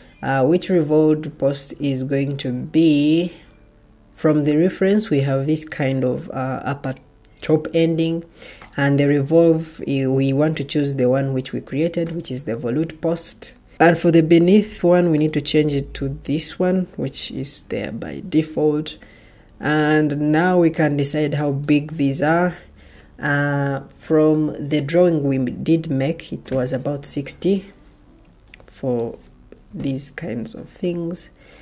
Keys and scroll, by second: 26.3 6, 29.3-30.2 typing.